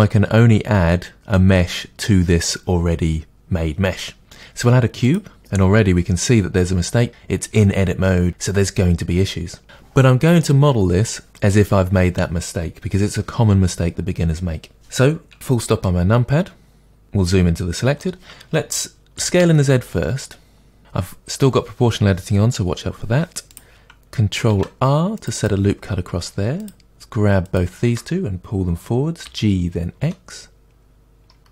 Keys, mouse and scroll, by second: 5.1-24.5 middle drag, 15.3 scroll up 2, 15.5 KP_Decimal, 16.8 scroll down 1, 19.2 s, 24.5 ctrl+r, 25.4 click, 26.6 click, 27.5 shift+click, 29.2 g.